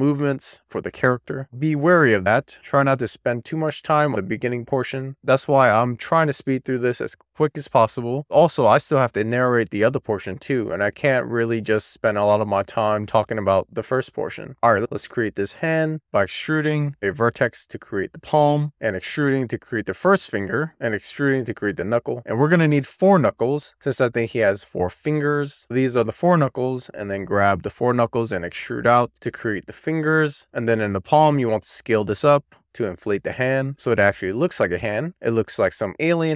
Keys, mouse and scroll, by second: 12.7 click, 14.3 middle click, 14.4 x, 18.3 click, 18.6 d, 19.7 x, 20.7 click, 21.7 x, 23.6 d, 25.8 click, 26.0 super+z, 26.1 click, 26.3 d, 26.5 click, 26.8 click, 27.4 shift+click, 27.9 shift+click, 29.3 x, 30.7 click, 32.0 ctrl+a, 34.6 click, 35.0-36.0 scroll down 2, 36.2 alt+z.